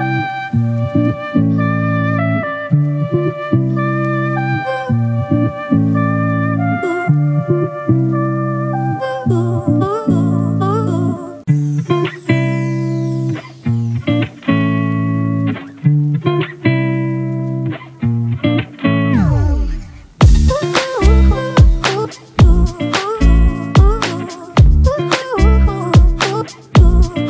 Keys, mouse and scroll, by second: 0.7 ctrl+t, 3.2 Return, 17.6 shift+click, 18.2-18.5 scroll down 1, 18.7 shift+click, 23.2 right click.